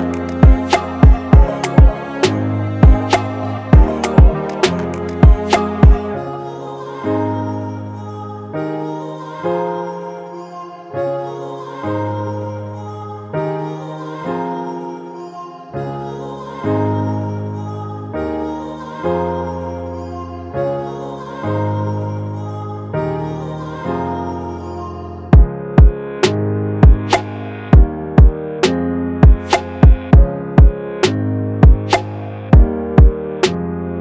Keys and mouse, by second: 0.5-1.9 drag, 5.8-7.2 drag, 7.3 click, 7.4-9.8 drag, 9.8-12.8 drag, 16.6 click, 16.8 click, 18.3 click, 19.9 click, 23.1 click, 23.2-26.4 drag, 26.4 1, 27.0 Return, 29.9 click, 30.4 typing, 31.0 click, 32.1 click.